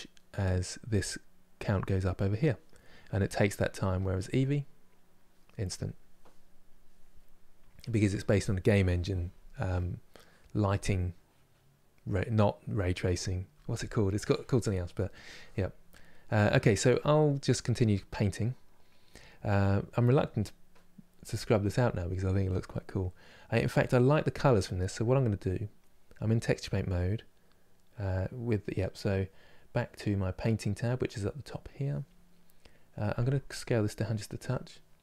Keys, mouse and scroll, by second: 6.8-35.0 middle drag.